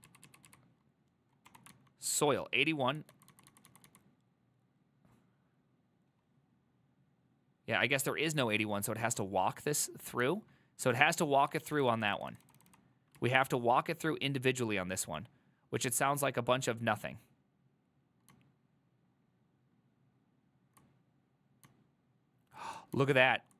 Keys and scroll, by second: 1.6 ctrl+d, 1.8-2.9 typing, 9.9 typing, 11.7 ctrl+d, 11.7 typing, 11.8 ctrl+d, 12.0 ctrl+d, 12.1-13.3 ctrl+d, 13.3 ctrl+u.